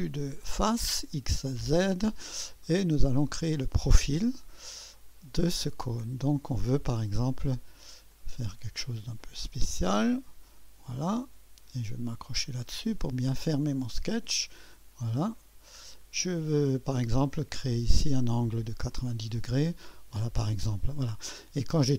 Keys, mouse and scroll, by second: 0.1 click, 1.3 click, 2.6 middle click, 4.9 click, 6.4 click, 8.1 click, 9.8 click, 10.9 click, 13.1 click, 14.4-15.8 right drag, 16.6 click, 17.4 click, 18.9 click.